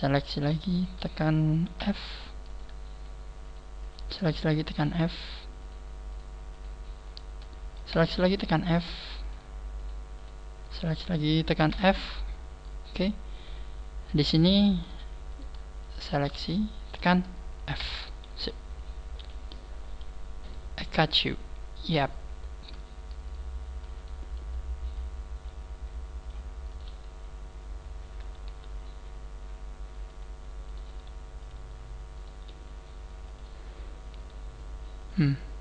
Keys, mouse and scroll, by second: 0.3 shift+right click, 0.7 shift+right click, 1.8 f, 2.5 shift+right click, 2.9 shift+right click, 3.5 shift+right click, 3.9 shift+right click, 4.3 f, 5.0 shift+right click, 6.1 shift+right click, 6.5 shift+right click, 7.9 f, 8.3 shift+middle click, 9.3 right click, 10.0 shift+right click, 10.1 shift+right click, 10.6 shift+right click, 11.7 f, 12.9-13.6 scroll down 4, 13.6 scroll down 1, 13.8 scroll up 1, 14.1 middle click, 15.3 right click, 15.8 shift+right click, 16.3 shift+right click, 16.8 shift+right click, 16.9 shift+scroll up 1, 17.7 f, 18.1 scroll down 5, 19.2 KP_1, 19.7 scroll up 3, 20.4 right click, 21.3 click, 22.3 scroll down 2, 23.1 scroll up 2, 23.9 right click, 24.9 click, 26.9 right click, 26.9 f, 28.5 g, 30.7 right click, 30.9 g, 31.5 click, 32.1 right click, 32.4 g, 33.5 click, 34.1 g.